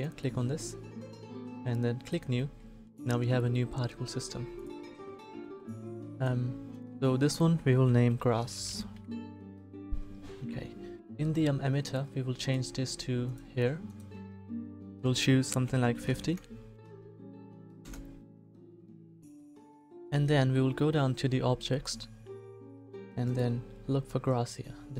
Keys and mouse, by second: 9.0 s.